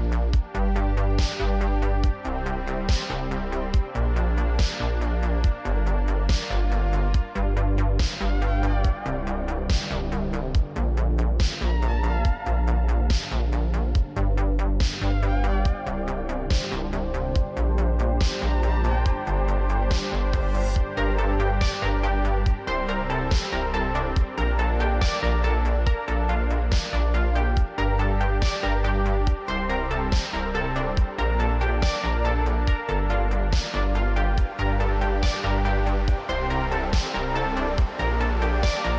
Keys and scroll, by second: 0.0-2.6 typing, 3.7 ctrl+z, 4.7-8.5 typing, 9.6-12.1 typing, 28.3 Tab, 29.4 1, 32.9 j, 34.1 j, 35.0 j, 35.8 j, 37.0 j, 37.8 Tab.